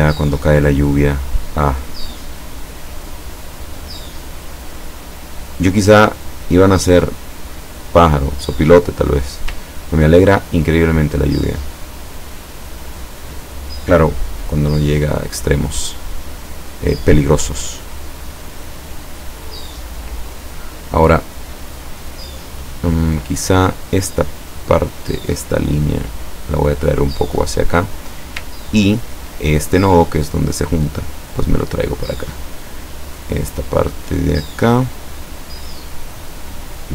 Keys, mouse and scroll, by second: 1.3 click, 2.7-5.4 drag, 6.2 click, 7.2-9.3 drag, 9.7 ctrl+scroll down 1, 17.9 click, 23.7 click, 24.5 click, 25.3-27.7 drag, 28.0 click, 28.3-29.3 scroll up 1, 29.8-31.8 drag, 32.1 click, 33.1 click, 34.6 click, 36.3-36.9 drag.